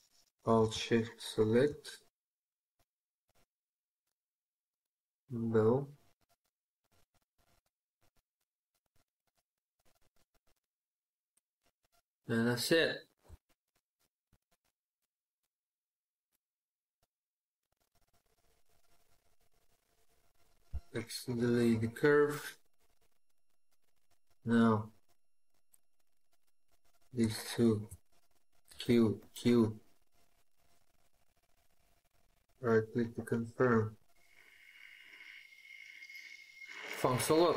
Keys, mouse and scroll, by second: 0.9 alt+shift+click, 5.8 right click, 7.0 scroll up 1, 7.1 scroll down 1, 7.5 scroll up 1, 7.8-8.3 scroll down 1, 8.3 scroll up 1, 8.4 scroll down 1, 8.6 scroll up 1, 8.7 scroll down 1, 8.8 scroll up 1, 8.9 scroll down 1, 12.1 scroll up 1, 12.3 scroll down 1, 12.4 scroll up 1, 12.4 scroll down 1, 12.6 scroll up 1, 12.7-13.0 scroll down 1, 13.7 shift+scroll down 1, 14.2 shift+middle click, 15.2 middle click, 17.1 scroll up 1, 17.2 scroll down 1, 17.6 scroll up 1, 17.8 scroll down 1, 17.8 scroll up 1, 20.5 x, 27.2 shift+click, 28.5 q, 29.0 q, 31.4 right click, 34.0 scroll down 1, 34.2-34.6 scroll up 1, 34.6 scroll down 1, 34.7-35.0 scroll up 1, 35.0-35.4 scroll down 1, 35.4 scroll up 1, 35.5-37.4 scroll down 1.